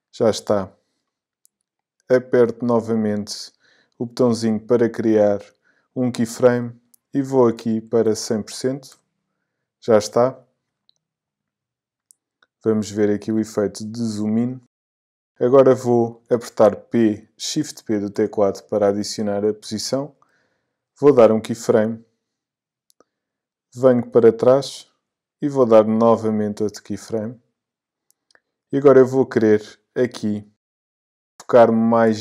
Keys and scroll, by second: 7.8 i, 18.1 shift+p.